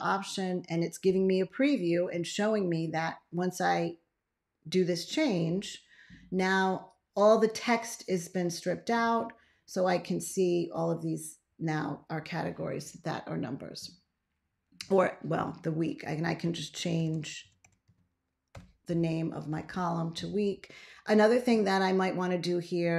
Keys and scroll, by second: 16.6-18.3 typing, 18.4 Return.